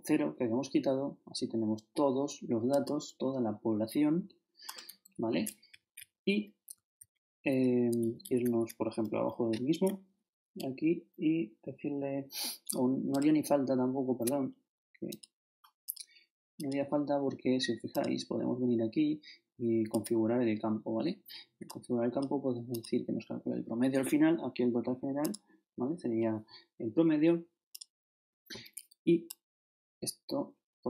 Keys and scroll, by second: 5.7 shift+Left, 6.7 shift+super+Left, 7.0 shift+super+Down, 8.2 shift+Down.